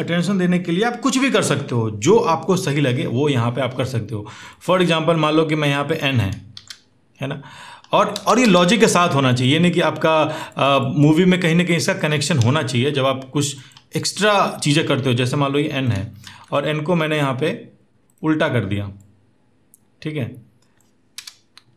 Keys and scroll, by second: 6.2 ctrl+x, 6.3 ctrl+x, 7.9 space, 8.1 space, 12.1 v, 16.0 ctrl+t, 21.0 Return.